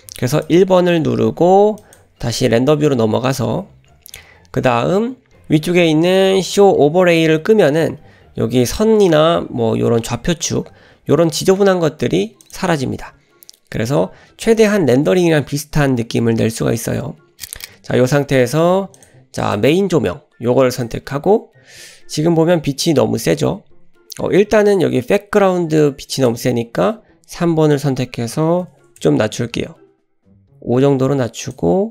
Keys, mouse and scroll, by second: 0.4 click, 2.1 click, 12.4 click, 18.9 click, 19.4 click, 20.7 click, 26.1 click, 27.7-29.9 drag, 31.4 click.